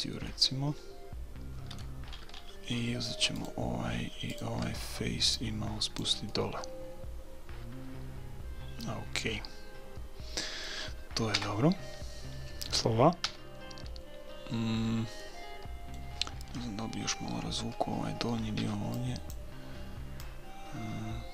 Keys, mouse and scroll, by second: 0.3-3.4 middle drag, 3.4-6.2 right drag, 5.4-6.9 drag, 6.3 right click, 6.9-8.3 middle drag, 11.3 KP_1, 12.2-17.0 middle drag, 13.3 a, 18.6 b, 20.2-21.3 drag.